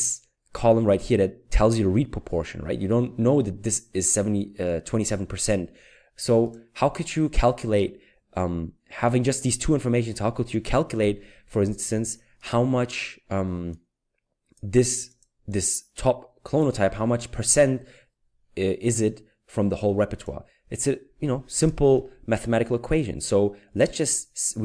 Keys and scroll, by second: 21.7 Return.